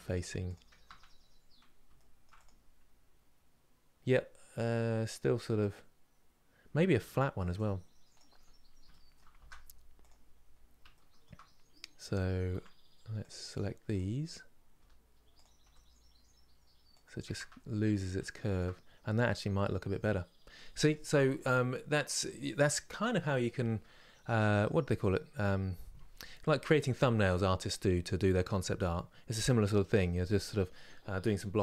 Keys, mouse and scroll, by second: 1.0 scroll down 2, 1.7 shift+middle click, 2.1 click, 7.8 click, 8.6 shift+middle click, 9.1 shift+d, 10.2 scroll up 3, 10.6-12.2 shift+middle drag, 12.2 Tab, 13.6 click, 17.4 scroll down 1, 17.9-31.6 shift+middle drag.